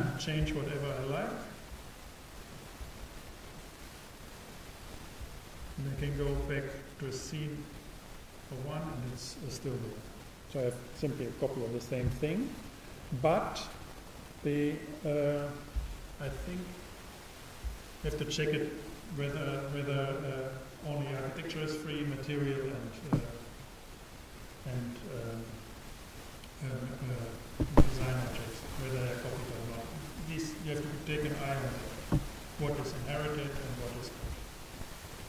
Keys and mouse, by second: 1.6-3.5 super+drag, 3.8-5.2 super+right drag, 4.6-8.9 super+drag.